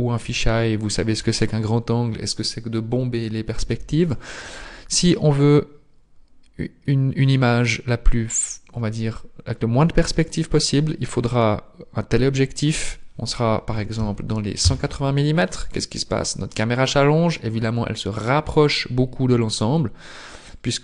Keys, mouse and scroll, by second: 14.6 click, 16.5-18.6 scroll down 8, 18.6-20.4 scroll down 1, 20.5 click.